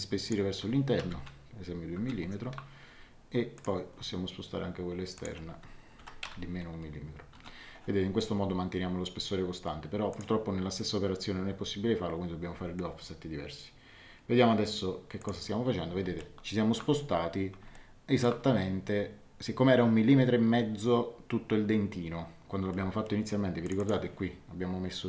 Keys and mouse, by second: 1.0 KP_1, 1.9 Return, 1.9 KP_Enter, 3.5 click, 5.1 click, 5.9 KP_Subtract, 6.2 KP_1, 7.3 Return, 7.3 KP_Enter, 10.1 click, 15.1 click, 16.1 middle click, 17.7 shift+middle click, 23.6 click.